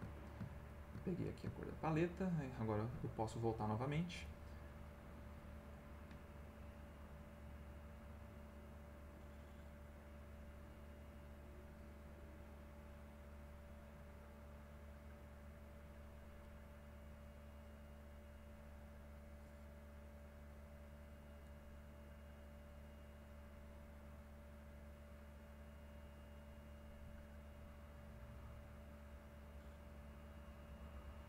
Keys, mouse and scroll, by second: 0.6 ctrl+click, 1.1 ctrl+middle click, 1.5 ctrl+middle click, 4.8 click, 7.0-8.9 drag, 9.9-13.3 drag, 14.2-16.4 drag, 17.3-18.6 drag, 18.9-21.4 drag, 22.3-25.4 drag, 25.9-29.2 drag, 29.4-30.7 drag, 31.0 click.